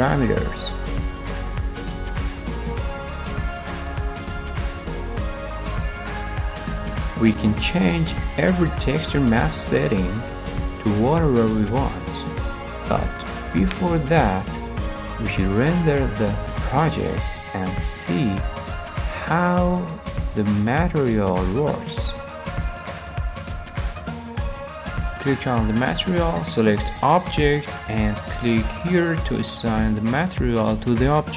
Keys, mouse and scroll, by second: 5.3 click, 5.8 scroll, 6.4-7.1 scroll, 8.0 scroll, 8.5 middle click, 10.2 middle click, 11.2 middle click, 12.6-13.7 middle drag, 14.3-15.3 middle drag, 18.0 middle click, 21.3 click, 22.2 middle click, 22.2 middle click, 22.5-23.1 scroll, 23.3 middle click, 23.9 middle click, 25.1 click, 25.8 click, 26.5-27.6 drag, 29.5-30.5 drag.